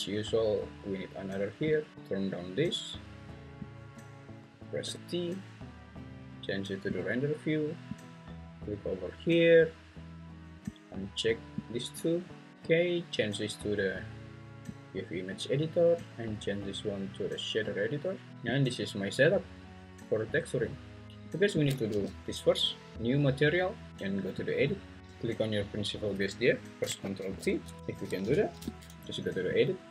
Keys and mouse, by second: 4.8 t, 7.0 click, 8.0-11.6 drag, 12.5 drag, 13.4-14.7 drag, 16.0-17.9 drag, 18.3 n, 21.9 g, 23.0 Escape, 24.5 click, 25.0 g, 29.6-29.9 ctrl+drag.